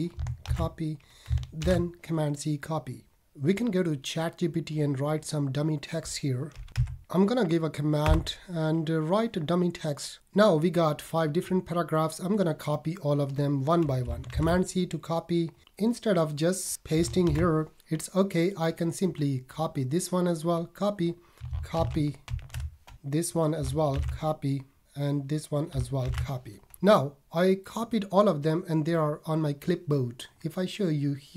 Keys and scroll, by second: 14.3 super+c, 17.2 super+v, 21.7 super+v, 22.3 super+c, 23.9 super+c, 26.0 super+c.